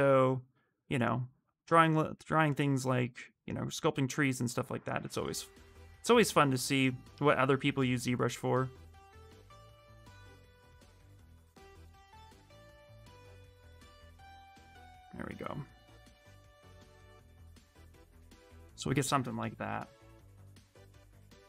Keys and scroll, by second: 20.1 q.